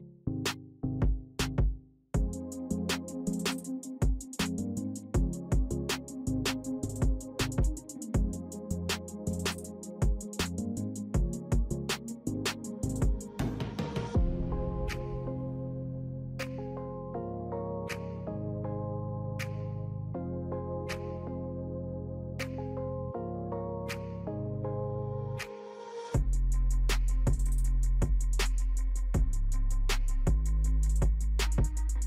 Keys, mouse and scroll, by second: 13.2-32.0 alt+shift+drag.